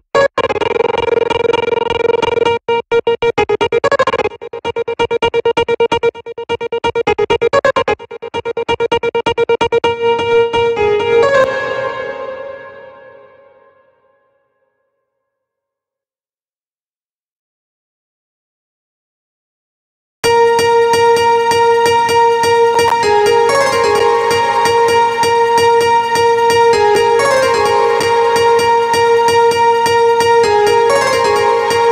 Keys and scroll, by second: 10.8 space, 19.6 space.